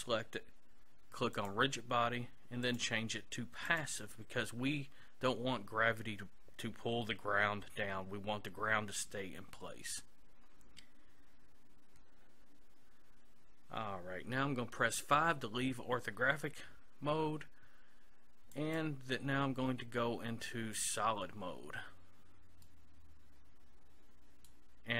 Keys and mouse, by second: 1.4-4.6 drag, 18.6-20.3 drag, 22.7-24.5 middle drag.